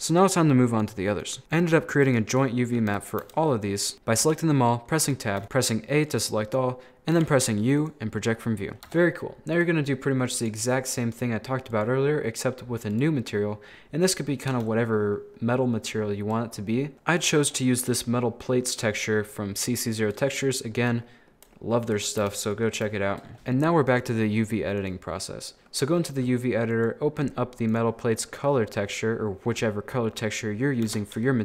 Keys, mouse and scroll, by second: 0.7 right click, 1.2 right click, 1.5 shift+right click, 2.1 shift+right click, 2.9 KP_7, 3.2 KP_1, 3.9 shift+middle click, 5.0 a, 5.4 a, 7.2 u, 8.4-8.7 scroll up 7, 8.9 Tab, 9.5-11.0 drag, 11.0-11.7 scroll down 3, 11.7-13.9 drag, 13.9 middle click, 14.4-14.7 scroll up 1, 14.7-16.7 shift+middle drag, 16.7-17.2 scroll up 12, 17.2-17.5 scroll down 7, 17.5-17.9 scroll up 2, 17.9-20.0 shift+middle drag, 20.0-20.5 shift+scroll down 3, 20.5-22.2 shift+middle drag, 22.2 KP_1, 22.8 scroll down 2, 22.9 shift+middle click, 23.3 right click, 23.9-25.3 drag, 25.3 scroll down 2, 25.6-26.5 scroll up 2, 26.7-28.2 drag, 28.2-28.7 scroll down 10, 28.9-29.2 scroll up 3, 30.9 Tab.